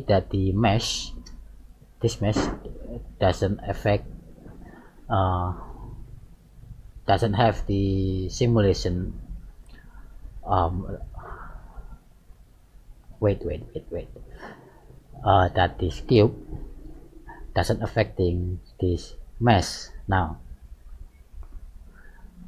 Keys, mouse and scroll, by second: 0.3 g, 1.7 right click, 4.8 middle click, 12.3 scroll up 1, 12.7-13.1 scroll down 1, 14.5 click, 16.1 right click, 19.4 right click, 22.2 right click.